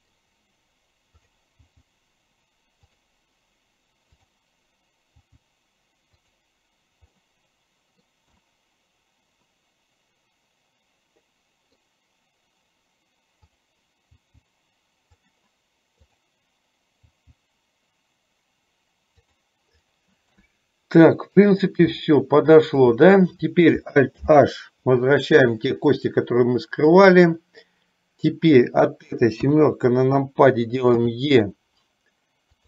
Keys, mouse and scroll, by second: 1.3 click, 1.8 g, 4.2 click, 5.2 g, 7.2-8.3 middle drag, 8.6-12.0 middle drag, 13.6 click, 14.3 g, 17.2 g, 20.6-21.6 middle drag, 22.2 shift+middle click, 24.3 alt+h, 26.3-27.3 middle drag, 29.7 KP_7, 31.1 e.